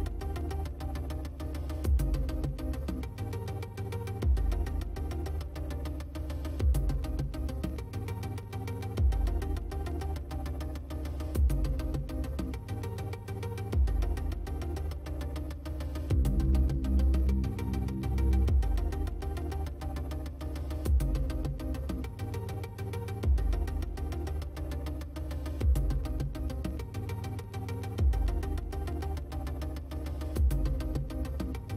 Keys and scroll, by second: 4.5 ctrl+alt+z, 10.2 space, 15.9 space, 19.7 space.